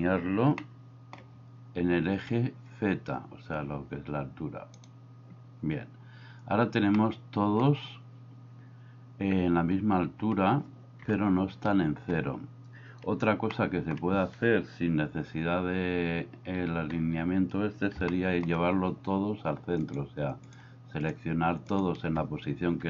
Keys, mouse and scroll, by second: 0.7-1.2 shift+middle drag, 4.8 click, 7.0-7.6 middle drag, 11.1 KP_1, 13.6 shift+middle click, 16.2 n, 18.2 shift+middle click.